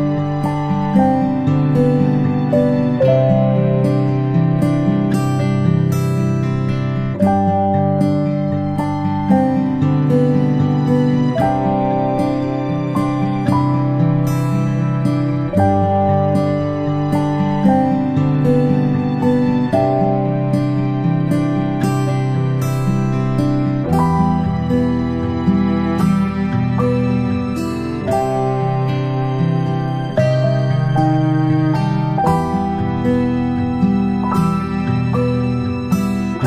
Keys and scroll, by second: 5.5 v, 14.7 ctrl+p, 26.7-28.1 space, 28.2 space, 28.5 space, 30.6 space, 32.8 space, 34.4-34.8 space.